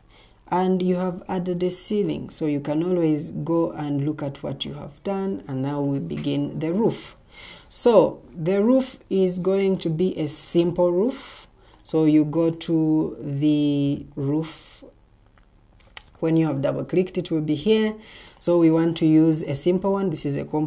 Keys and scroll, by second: 7.1 Escape.